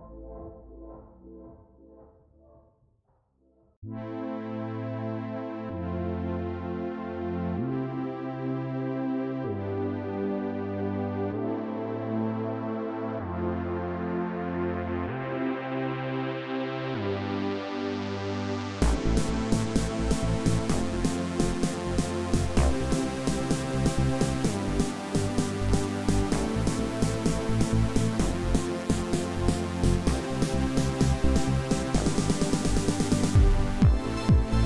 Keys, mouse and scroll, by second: 8.2 middle click, 8.3 scroll down 2, 8.4 space, 9.4-11.3 scroll down 12, 15.7 middle click, 16.0 scroll down 4, 16.3 y, 16.3 space, 16.5 scroll up 9, 17.2 scroll down 12, 17.6 middle click, 17.9-18.6 scroll up 11, 18.2 Right, 19.1 scroll down 10, 19.3-20.2 ctrl+scroll up 15, 20.3 shift+scroll down 1, 20.4 shift+middle click, 20.9 shift+middle click, 21.5 scroll down 2, 21.6 y, 21.8 middle click, 22.1 scroll down 3, 22.4 shift+middle click, 22.6 middle click, 22.8 middle click, 23.0 middle click, 23.0 y, 23.0 scroll up 12, 23.2 middle click, 25.9 space, 28.2 middle click, 28.3-29.6 typing, 29.5 middle click, 29.7 scroll down 2, 29.9 shift+middle click, 30.0-30.4 scroll up 6.